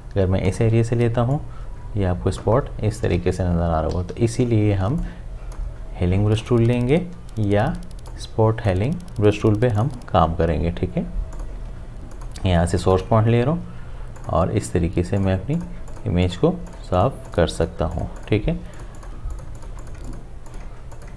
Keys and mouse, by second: 0.5-4.0 alt+drag, 4.0 ctrl+z, 5.0-6.4 drag, 7.0 j, 8.1-9.8 drag.